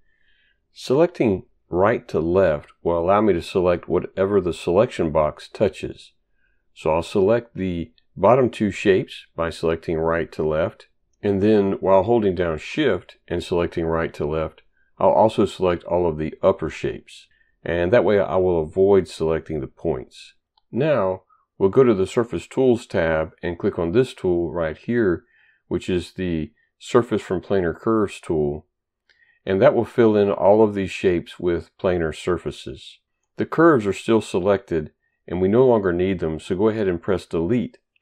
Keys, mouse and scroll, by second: 9.2 click, 13.1 shift+click, 22.0 click, 28.8 click.